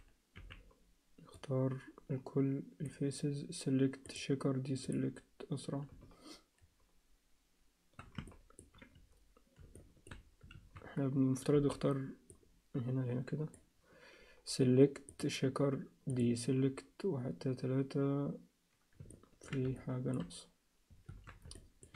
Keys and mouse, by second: 0.3 b, 4.1 click, 8.3 ctrl+alt+middle click, 9.8 alt+shift+middle click, 10.6 alt+a, 11.5 b, 15.2-16.2 drag, 19.1 ctrl+alt+middle click, 19.8 alt+shift+middle click, 21.1 alt+a, 21.5 alt+shift+middle click.